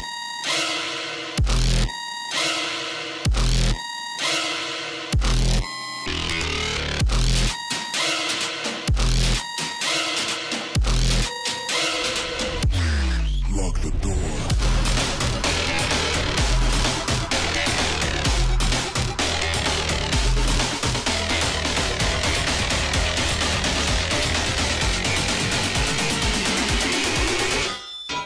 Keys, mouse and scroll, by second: 3.8 click, 6.9 click, 11.5 click, 13.6 click, 19.0-23.2 shift+drag, 23.2-28.2 drag.